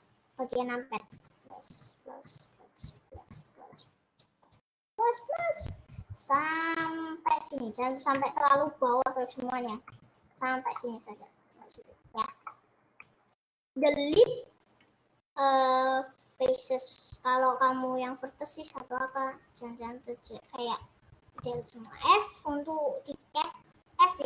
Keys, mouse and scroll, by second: 1.1 KP_Add, 1.7 KP_Add, 2.3 KP_Add, 3.1 KP_Add, 3.5 KP_Add, 3.7 KP_Add, 4.1 KP_Add, 4.5 KP_Add, 5.3 KP_Add, 6.3 KP_Add, 6.7 KP_Add, 8.5 KP_Add, 9.9 KP_Subtract, 10.8-16.5 middle drag, 16.5 Delete, 19.4-20.7 drag, 21.3 f, 24.0-24.2 middle drag.